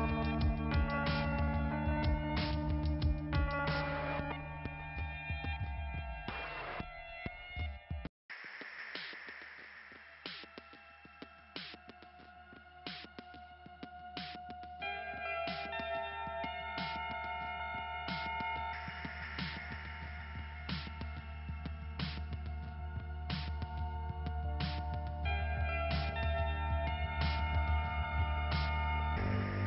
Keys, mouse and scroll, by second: 3.8 click, 4.8 click, 6.4 click, 7.1-7.5 scroll down 1, 7.5 middle click, 8.1 click, 8.8-9.1 scroll up 2, 10.2 click, 10.9 scroll up 1, 11.7 middle click, 12.4 click, 13.1 middle click, 13.6 click, 15.0 click, 16.6 click, 17.6 click, 19.2 click, 21.0 click, 23.0 click, 24.4 click, 26.0 middle click, 26.7 click, 28.4 click, 28.5 click.